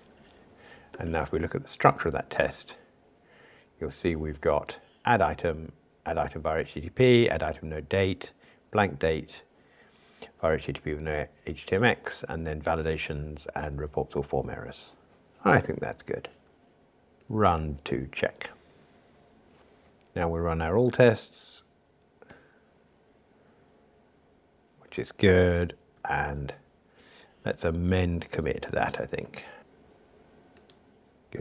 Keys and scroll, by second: 17.2 ctrl+r, 25.9 super+k, 28.3 ctrl+alt+m.